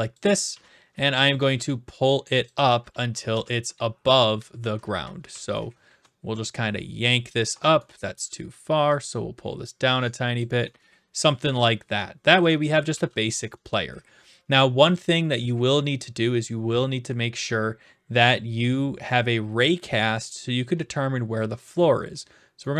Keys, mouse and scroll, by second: 0.1 ctrl+click, 0.5 w, 2.4-5.8 typing, 2.4 ctrl+click, 5.5 right click, 7.4 ctrl+click, 7.9 typing, 8.1 right click, 10.3 click, 10.7-13.1 typing, 11.2 click, 12.0-13.1 right drag, 13.2-14.3 right drag, 14.9-16.0 drag.